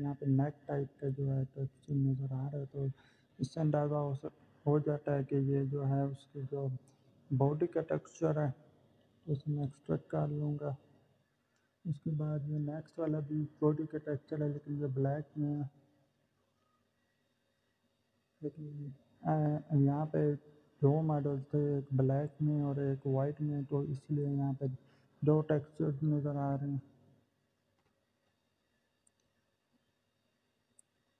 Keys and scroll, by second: 5.5-7.1 typing.